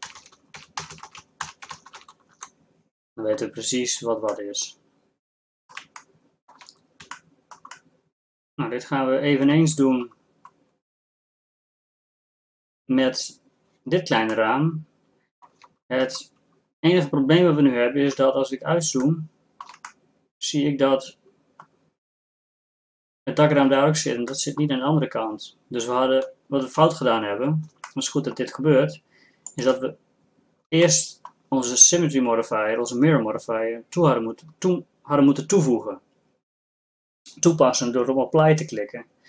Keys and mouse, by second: 0.6 a, 1.9 a, 1.9 o, 3.9-4.6 middle drag, 14.5 middle click, 18.2-19.3 middle drag, 20.2-21.9 middle drag, 27.2-28.2 middle drag, 29.5-32.6 middle drag.